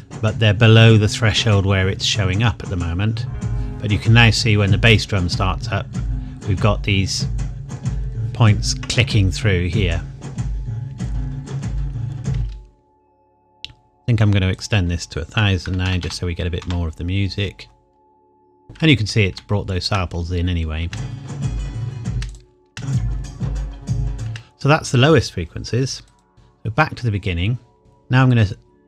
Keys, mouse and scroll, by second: 9.9 scroll down 1, 11.2 scroll up 1, 12.3 space, 14.5 click, 15.3 KP_1, 15.6 KP_0, 16.6 KP_Enter, 17.6-19.3 scroll down 1, 19.7 shift+middle click, 20.1-20.8 scroll up 1, 20.8 space, 22.3 click, 22.7 space, 26.0 click, 26.3 middle click.